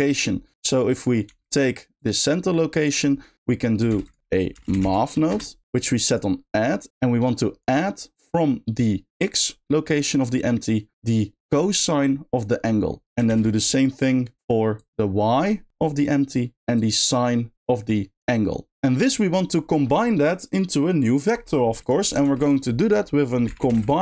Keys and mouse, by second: 0.5 middle click, 0.9 drag, 1.2 g, 2.7 middle click, 3.9 shift+a, 6.9 ctrl+z, 9.0-10.9 drag, 11.4-12.6 drag, 14.7-16.3 shift+drag, 16.7 click, 17.0-17.8 drag, 21.8 click, 22.2 shift+a.